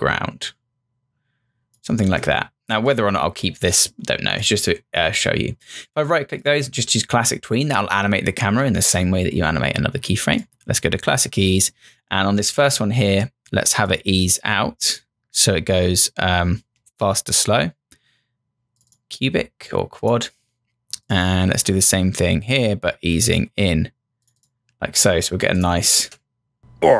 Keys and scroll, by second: 25.9 Return.